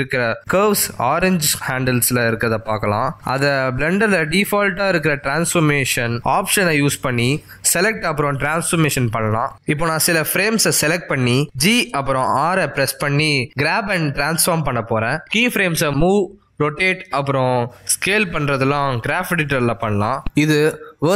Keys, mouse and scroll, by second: 0.7 click, 1.1 g, 4.2 click, 4.4 g, 7.1 shift+click, 7.4 g, 10.4 click, 11.3 shift+click, 12.5 click, 13.4 shift+click, 15.3 g, 18.8 r, 20.9 s.